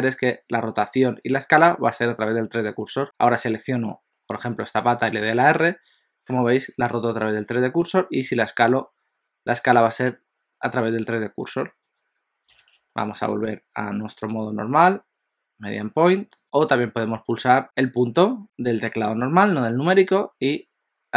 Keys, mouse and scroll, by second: 3.0 click, 5.2 r, 8.2 s, 13.5 click.